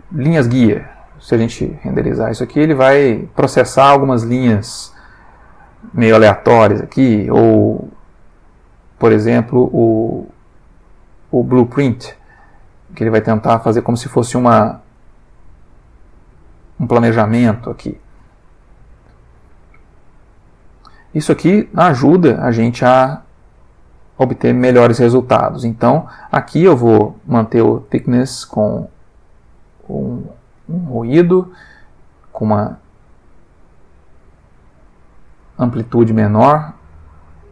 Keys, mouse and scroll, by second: 0.2 click, 1.1 F12, 5.3 click, 6.5 click, 7.8 click, 8.3 click, 11.4 click, 12.5 F12, 18.0 click, 18.9 click, 20.1 click, 21.9 click, 22.4-23.0 middle drag, 23.1 F12, 26.0 click, 27.2 click, 27.6 middle click, 28.6 click, 30.1 click, 30.6-31.2 middle drag, 32.3-33.8 drag, 34.0-35.4 drag, 35.6 F12.